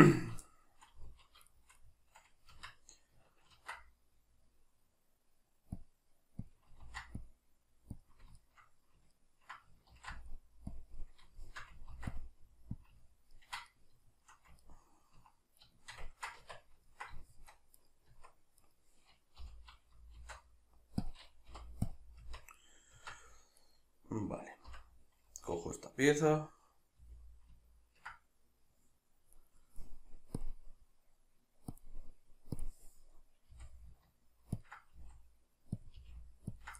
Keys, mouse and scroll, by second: 0.1 right click, 0.5-6.5 shift+middle drag, 1.0 z, 2.5 Tab, 3.5 ctrl+r, 6.5 click, 6.8 ctrl+r, 6.8-8.0 middle drag, 8.0 click, 8.4-10.8 shift+middle drag, 9.9 ctrl+r, 10.8 click, 11.0-12.8 middle drag, 11.9 ctrl+r, 12.8 click, 13.0-17.8 ctrl+middle drag, 16.4 Tab, 17.8 right click, 18.1 Tab, 18.6 right click, 19.4 l, 20.2 shift+d, 21.1 click, 21.5 p, 22.2 Tab, 22.6 right click, 22.9 Tab, 23.6 right click, 24.7 l, 29.5 right click, 30.4-34.7 drag, 33.5 g, 35.0 s, 35.9 click, 36.0 g, 36.6 ctrl+click.